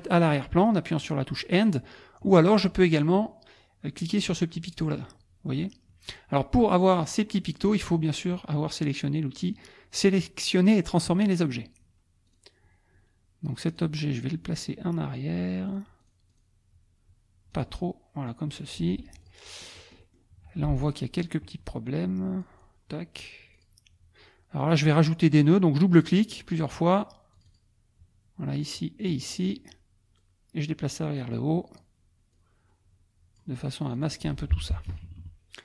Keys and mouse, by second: 2.8 click, 12.3 click, 13.7 click, 15.7 click, 16.0 click, 17.5 click, 18.1 middle click, 18.5 middle click, 19.2 click, 19.9 click, 20.4 F2, 20.8 click, 21.5 click, 23.5 click, 24.6 click, 25.9 click, 27.3 click, 29.0 click, 30.2-31.4 drag, 32.3-33.5 drag, 33.9 click, 34.5 F1, 34.9 KP_Subtract.